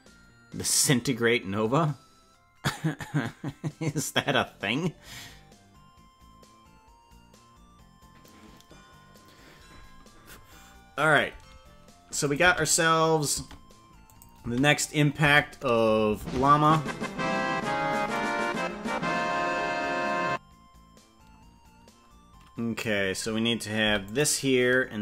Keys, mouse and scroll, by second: 12.2 click, 12.5 space, 13.5 space, 14.1 click, 14.5 space, 15.3 space, 16.3 ctrl+Tab, 16.7 right click, 18.1-22.8 drag, 23.9 i.